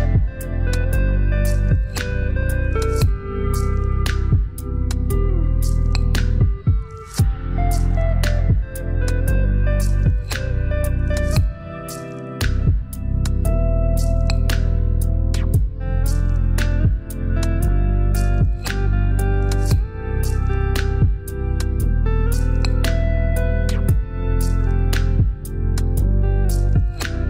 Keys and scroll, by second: 16.2 shift+d.